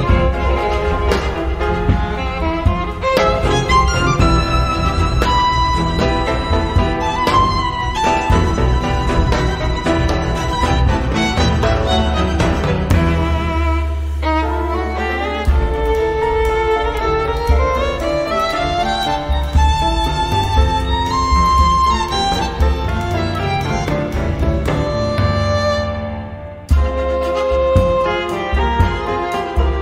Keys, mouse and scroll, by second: 0.4 click, 1.8 scroll down 2, 2.2 0, 2.9-3.2 scroll down 2, 3.6-4.2 scroll up 2, 4.8 scroll up 2, 5.8 click, 8.9 click, 10.8 click, 12.2 click, 14.1 click, 15.0 click, 17.4 click, 19.3 click, 19.8 click, 21.4 click, 22.3-23.0 scroll down 4, 24.3 click, 26.2 click.